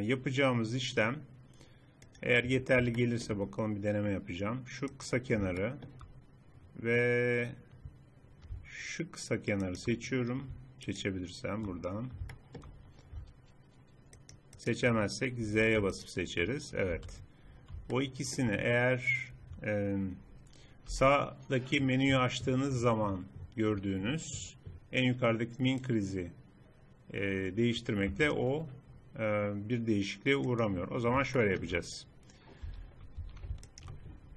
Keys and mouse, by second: 2.1-3.7 drag, 4.9 middle click, 5.3 click, 6.9 middle click, 7.9-9.7 middle drag, 9.7-12.5 drag, 12.9-14.2 middle drag, 14.2-15.5 drag, 15.5 z, 16.9 z, 20.9 n, 25.8-29.0 drag, 30.5-32.3 drag, 32.3 middle click, 32.7 a, 33.3 a.